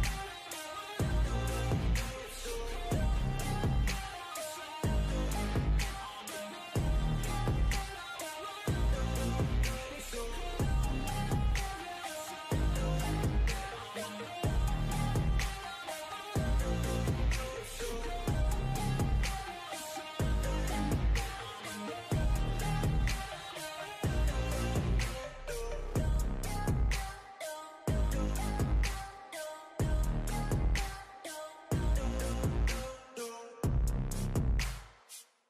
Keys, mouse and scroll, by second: 0.5 e, 1.0 s, 3.3 e, 3.8 s, 5.3 e, 5.7 s, 7.6 click, 8.0 shift+click, 8.5 e, 9.7-12.5 typing, 12.0 scroll down 9, 12.6-13.6 right drag, 13.6 click, 14.3 l, 14.5 g, 16.3-16.8 middle drag, 16.8-17.2 scroll up 2, 17.2 middle click, 17.5 scroll up 1, 18.1 s, 19.1 click, 19.4-20.0 middle drag, 20.0 ctrl+r, 20.9 middle click, 21.3 ctrl+r, 21.9 middle click, 22.6 scroll up 1, 22.8-24.2 shift+middle drag, 24.2 3, 24.4 click, 24.7-25.6 middle drag, 25.6 scroll up 4, 25.8-26.9 middle drag, 27.3 shift+drag, 27.5 shift+click, 27.9 shift+click, 28.1 x, 29.0 ctrl+z, 29.1 x, 29.9 KP_3, 31.1-31.5 drag, 31.5 1, 31.6 click, 32.3 e, 34.0 r, 35.0 e.